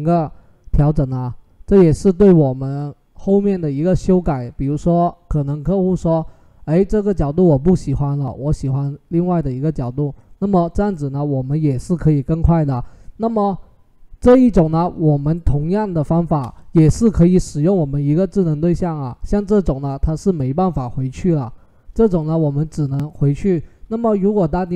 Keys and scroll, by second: 16.1 Return.